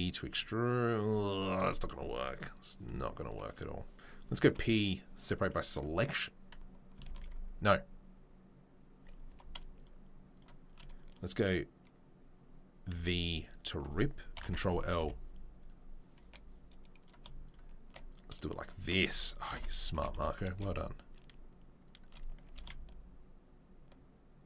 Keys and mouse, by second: 4.4 p, 7.2 ctrl+z, 9.3 2, 9.7 shift+right click, 9.8-17.4 shift+middle drag, 12.9 v, 14.3 ctrl+l, 14.8 g, 16.2 3, 17.4 shift+right click, 17.5-24.4 shift+middle drag, 19.5 ctrl+l, 19.9 g, 22.5 s.